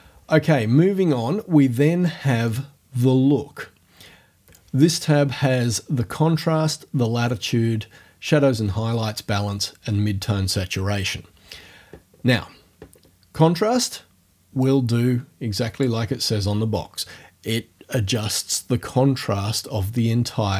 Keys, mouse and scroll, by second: 2.5 click, 14.6-16.0 drag.